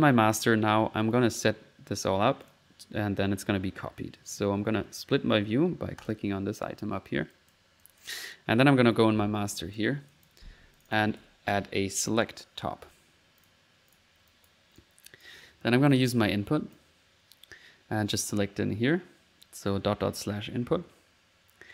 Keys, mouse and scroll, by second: 2.0 middle click, 2.4 click, 6.0 click, 6.4 click, 7.3 click, 7.8 click, 8.4 middle click, 8.7 middle click, 9.5 click, 10.1 click, 10.8 click, 11.2-11.5 typing, 12.0 click, 13.4 click, 14.3 click, 14.8 click, 15.9-17.1 drag, 17.2 click.